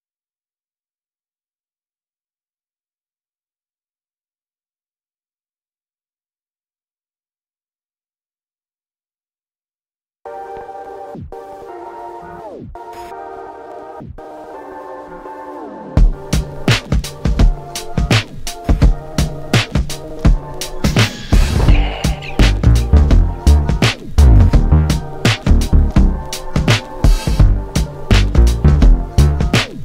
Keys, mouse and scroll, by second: 0.2 F8, 1.9 ctrl+space, 2.4 F9, 8.1 click, 12.1-13.4 scroll up 1, 16.9 scroll down 1, 18.8 scroll up 1, 19.5 scroll down 1, 20.2 scroll up 1, 22.6-23.4 scroll up 1.